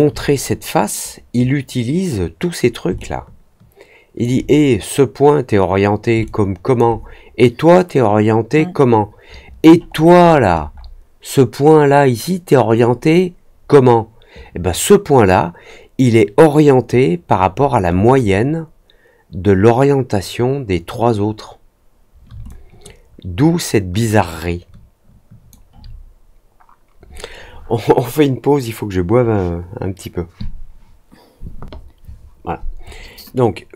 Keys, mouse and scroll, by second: 2.9-4.1 alt+drag, 6.2 alt+click, 9.8 middle click, 9.8-10.9 scroll up 4, 10.1 middle click, 10.4 middle click, 17.2-18.3 scroll down 4, 22.4-25.4 alt+drag.